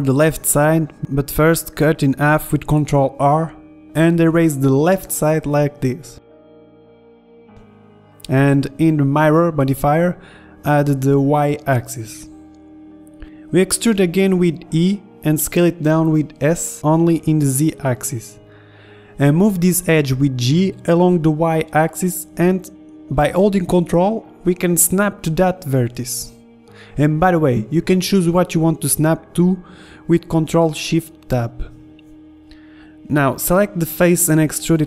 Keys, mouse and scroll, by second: 1.8 middle click, 3.4 ctrl+r, 3.6-4.5 scroll up 1, 5.0 ctrl+Tab, 6.9 a, 7.1 a, 7.4 b, 8.2 Delete, 8.2 ctrl+z, 10.1 Tab, 12.4 Tab, 15.2 e, 17.1 s, 17.1 o, 17.1 s, 19.0-21.9 drag, 21.9 ctrl+Tab, 23.0-24.9 drag, 25.8 right click, 26.7 click, 28.4 ctrl+Tab, 29.8 ctrl+Tab, 30.5-32.9 drag, 32.9 e.